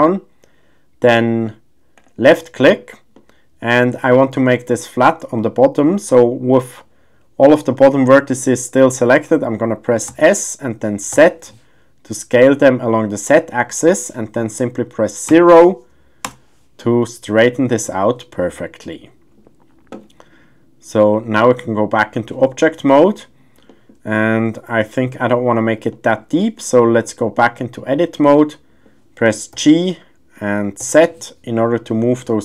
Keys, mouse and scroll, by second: 3.1 middle click, 5.4 middle click, 7.5 middle click, 9.2 middle click, 11.1 s, 11.1 z, 15.3 KP_0, 16.4 Return, 17.0 middle click, 21.1-22.1 drag, 22.6-23.1 middle drag, 23.7 shift+middle drag, 23.9 shift+scroll, 24.1-25.0 middle drag, 25.9 middle drag, 26.4 shift+middle drag, 27.4-28.4 drag, 29.5 g, 30.8 z.